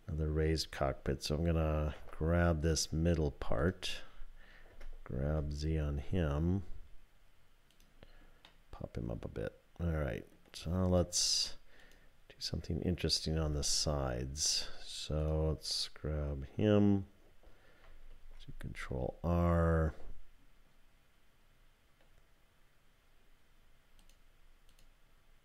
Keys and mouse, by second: 2.0 2, 4.7 g, 8.5-10.3 drag, 13.4 3, 15.2 click, 18.1 ctrl+r.